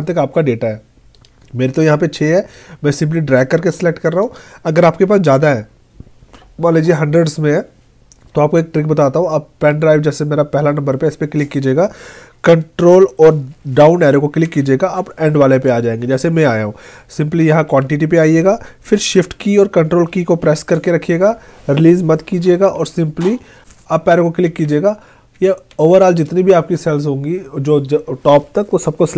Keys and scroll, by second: 14.5 ctrl+Down, 17.4 Right, 24.5 ctrl+shift+Up.